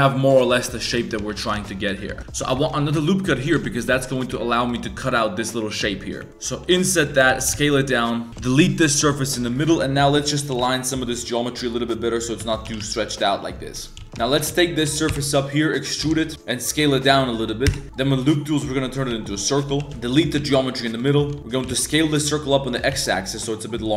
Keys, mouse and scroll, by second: 0.1 3, 0.3 click, 0.5 z, 1.4 ctrl+shift+click, 2.1-3.8 typing, 2.6 alt+click, 4.1 click, 4.6 ctrl+shift+click, 6.5 i, 7.3 shift+s, 8.3 3, 9.4 x, 9.4 1, 9.6 click, 10.2 shift+click, 10.5 g, 12.2 click, 12.5 click, 12.5-16.0 typing, 13.8 click, 17.7 w, 19.1-21.4 typing, 20.9 alt+click, 21.4 ctrl+z, 22.7 s, 22.9 s.